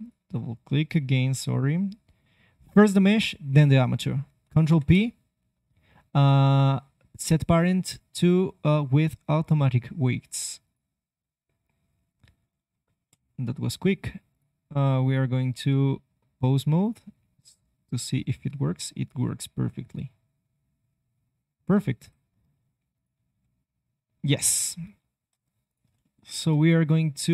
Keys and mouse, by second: 0.1-4.4 drag, 4.6 ctrl+p, 13.0 KP_3, 13.8 middle click, 14.2 click, 15.6 ctrl+Tab, 17.2 g, 22.9 click, 23.1 r, 24.1 click, 24.9 ctrl+Tab, 25.6-26.7 drag.